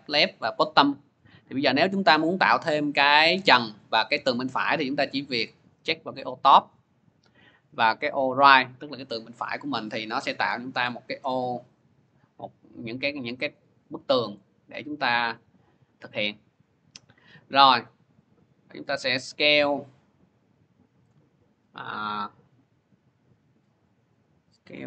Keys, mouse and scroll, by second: 6.2 click, 8.3 click, 10.3 click, 11.1 click, 11.1-13.3 scroll, 13.3 scroll, 13.8 scroll, 14.5-15.1 scroll, 18.9 scroll, 20.9 click, 21.4 scroll, 22.1 scroll.